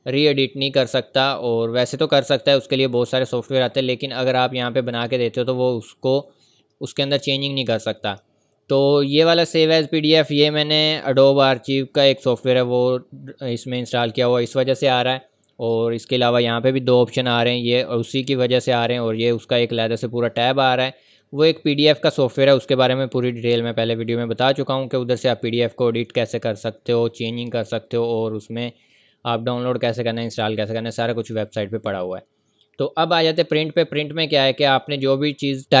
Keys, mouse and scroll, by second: 4.2 click, 6.6 click, 15.9 click, 19.3 click.